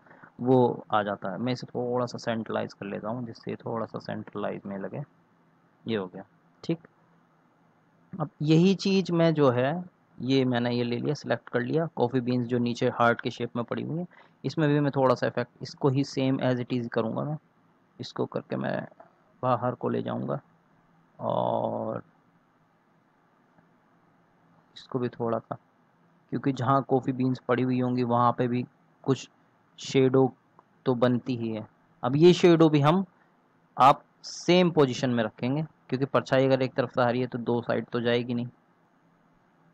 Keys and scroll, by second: 0.5 Up, 0.6 Up, 0.8 Up, 33.0 ctrl+z.